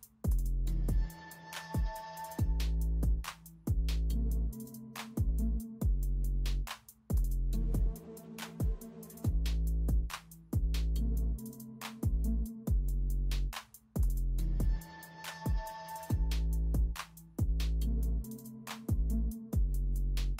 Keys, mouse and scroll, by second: 0.0-2.6 typing, 3.5 alt+Delete, 7.9 space, 9.2 alt+Delete, 10.6-11.1 typing, 12.5-14.5 typing, 17.0-17.3 typing, 18.6 space.